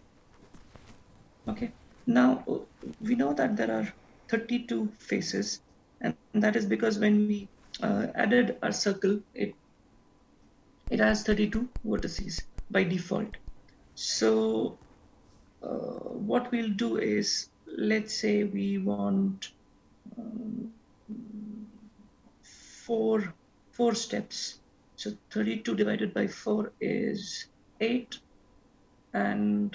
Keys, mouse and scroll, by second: 7.5-10.5 scroll down 1, 12.0-12.6 scroll up 1, 12.6-14.5 scroll down 1, 14.5-14.9 scroll up 1.